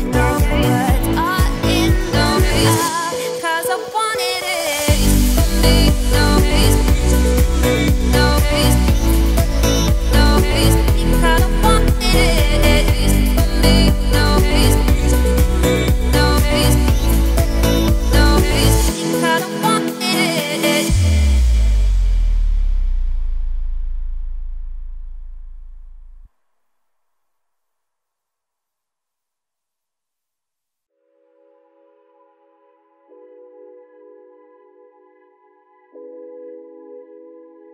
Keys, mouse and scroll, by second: 6.6 click, 7.2 shift+click, 8.1 ctrl+b, 13.5 click, 13.8-14.1 ctrl+scroll up 1, 14.1 ctrl+b, 15.9 click, 16.4 ctrl+b, 17.9 scroll down 3, 18.1 middle click, 18.6 scroll up 2, 18.8 middle click, 19.6 scroll up 1, 19.8 g, 21.7 middle click, 22.3 e, 23.3 z, 23.7-24.0 scroll up 2, 24.0 shift+middle click, 24.8 g, 26.2 z, 26.4 scroll down 2, 26.5 middle click, 27.0 a, 27.6 shift+n, 28.1 Tab, 28.4 shift+click, 29.2 ctrl+KP_Subtract, 29.8 ctrl+s, 30.2-30.9 middle drag, 30.9-31.4 scroll down 5, 31.4-32.5 middle drag, 32.5 click, 32.8 middle drag, 33.0-33.7 scroll up 3, 33.7 click, 34.9-37.7 drag.